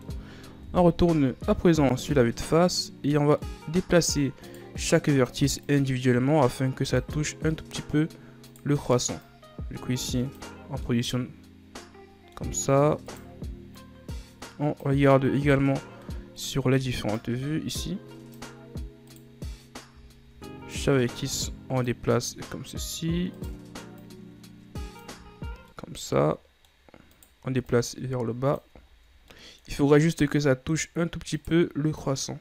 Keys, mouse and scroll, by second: 0.7 KP_1, 1.8-2.1 shift+scroll up 4, 3.2 scroll down 2, 3.5-4.6 middle drag, 4.6 right click, 5.0 middle click, 5.7-7.6 drag, 7.6 middle click, 8.1-8.6 scroll up 1, 8.6 right click, 9.3-11.0 drag, 11.0-12.7 middle drag, 12.7 scroll up 1, 13.1 right click, 13.9-15.1 drag, 15.1 middle click, 15.7-16.2 scroll up 3, 16.2-17.3 middle drag, 17.3-19.2 drag, 19.2 right click, 20.1-20.8 scroll up 3, 20.8-22.2 drag, 22.2-23.5 middle drag, 23.5 right click, 24.1-25.4 drag, 25.4-25.8 ctrl+scroll up 4, 25.8-27.3 middle drag, 27.3 right click, 27.7-28.9 drag, 28.9-29.4 ctrl+scroll up 2, 29.4-31.5 middle drag, 31.5 right click, 32.1 click.